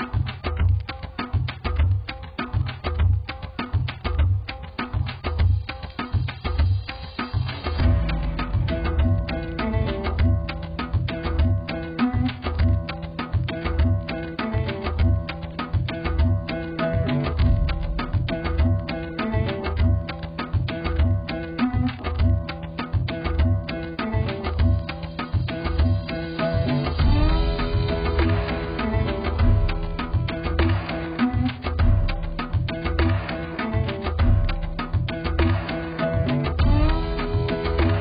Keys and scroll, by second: 7.4 ctrl+t, 23.2 b, 37.3 ctrl+j.